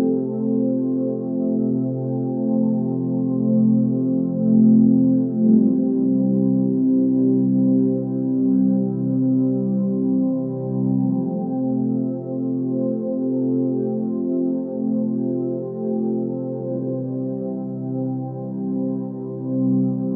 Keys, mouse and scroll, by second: 3.6 ctrl+space, 6.1 ctrl+;, 7.7 ctrl+space.